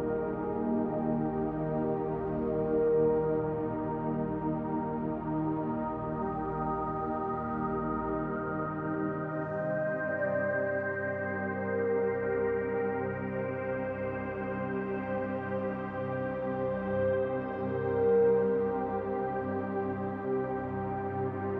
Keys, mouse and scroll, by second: 0.0 middle click, 1.2 click, 2.0 click, 3.3 click, 3.9 click, 4.5 click, 6.3 s, 10.2 Tab, 11.1 Tab, 12.8 s, 19.3 middle click, 19.3 s, 21.1 r.